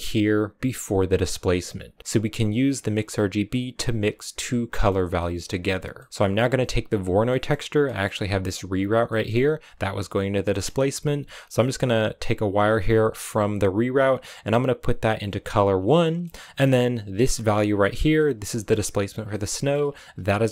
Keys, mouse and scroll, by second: 4.3-4.6 scroll down 4, 4.6 middle click, 4.9 scroll down 3, 5.0 middle click, 6.0-6.4 scroll up 4, 6.4 click, 7.1 middle click, 7.7 scroll down 1, 7.8-12.2 middle drag, 12.2 click, 15.7 scroll down 3, 15.9 middle click, 16.4-17.1 scroll up 6, 17.1-18.2 drag, 18.2 scroll down 3, 18.4 middle click, 19.0 scroll down 1, 19.2 middle click, 19.6-20.4 scroll up 4, 20.4-20.5 scroll up 2.